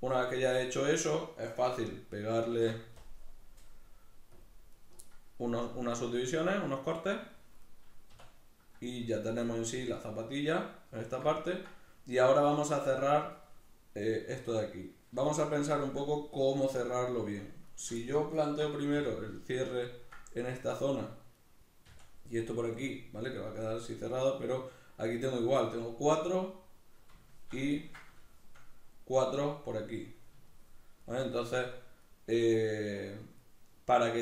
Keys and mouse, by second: 2.3 ctrl+r, 4.6 right click, 7.1 shift+middle click, 7.4 middle click, 7.9 \, 8.5 middle click, 8.9 shift+middle click, 9.4 middle click, 11.1 ctrl+middle click, 13.2 middle click, 15.0 shift+middle click, 15.4 ctrl+middle click, 16.7 right click, 17.5 shift+right click, 17.8-21.1 middle drag, 18.7 f, 21.1 right click, 21.6 f, 22.0-34.2 middle drag.